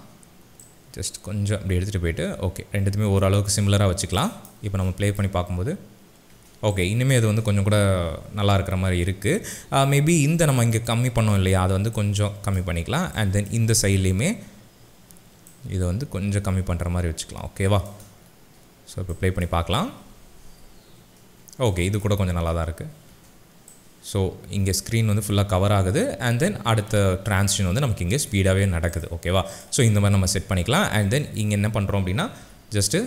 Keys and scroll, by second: 4.7 space, 9.8 z, 19.6 space, 20.1 alt+space, 21.3 space, 32.4 n.